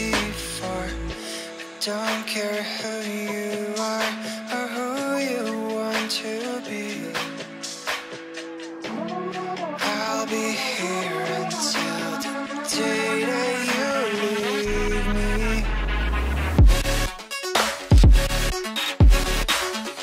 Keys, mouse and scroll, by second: 3.4 ctrl+click, 5.3 space.